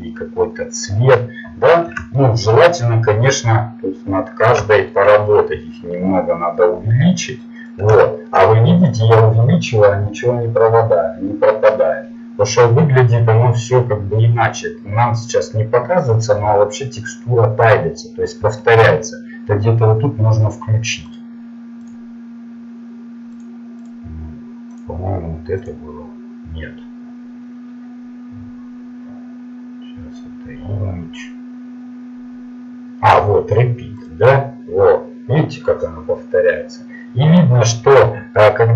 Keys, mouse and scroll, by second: 5.4 s, 21.1-23.3 drag, 21.1 n.